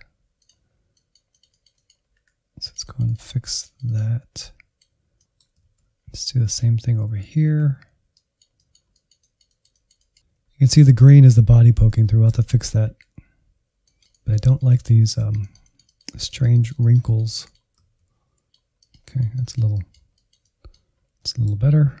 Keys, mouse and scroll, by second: 0.3-1.6 drag, 1.6 Insert, 1.9-4.7 drag, 4.7 middle click, 5.4 alt+z, 5.5 scroll down 1, 5.8 ctrl+click, 5.9 alt+z, 6.1 Insert, 6.3-8.0 drag, 8.0 middle click, 8.2 alt+z, 8.5 Insert, 9.0 alt+z, 9.1 click, 9.3 Insert, 9.4 click, 9.9 middle click, 10.3-10.9 scroll down 5, 10.9-11.3 scroll up 4, 11.3 shift+middle click, 11.8 Insert, 12.4 click, 12.6 alt+z, 13.3 alt+z, 13.6 click, 13.7 Insert, 14.0-16.7 drag, 16.7 alt+z, 17.1 Insert, 17.7 ctrl+click, 17.9 alt+z, 18.2 Insert, 18.5-20.7 drag, 20.7 scroll down 2, 20.9 middle click, 21.4 Insert, 21.7 shift+middle click, 21.9-22.0 scroll up 2.